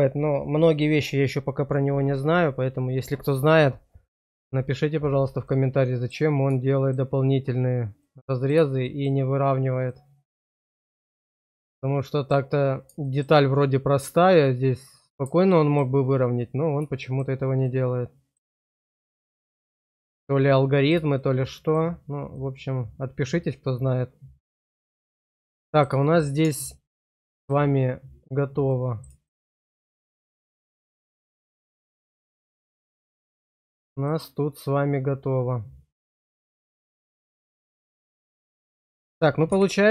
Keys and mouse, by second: 5.6 middle click, 6.8 shift+middle click, 8.0 middle click, 8.9 shift+middle click, 9.8 middle click, 10.8 shift+middle click, 12.0 middle click, 14.8 middle click, 15.6 shift+middle click, 17.0 shift+middle click, 17.7 middle click, 18.6 shift+middle click, 19.0 middle click, 19.8 shift+middle click, 20.4 middle click, 21.2 shift+middle click, 22.3-24.7 middle drag, 25.2 shift+middle click, 25.4 middle click, 26.0 shift+middle click, 27.2 middle click, 28.6 middle click, 29.2 shift+middle click, 31.5 click, 32.6 middle click, 33.6 shift+middle click, 34.0-37.6 middle drag.